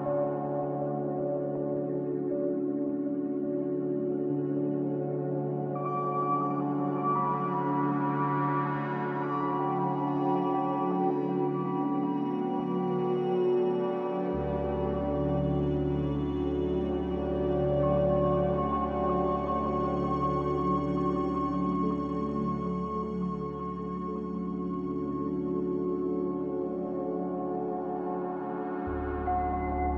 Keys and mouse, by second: 0.7 m, 3.6 shift+click, 5.3 m, 7.4 click, 8.1 shift+click, 9.8-10.5 middle drag, 11.1 click, 11.9 shift+click, 12.9 m, 14.8 shift+click, 15.7 m, 17.7 shift+click, 19.1 m, 20.3 click, 22.4 m, 24.3 click, 28.9 click.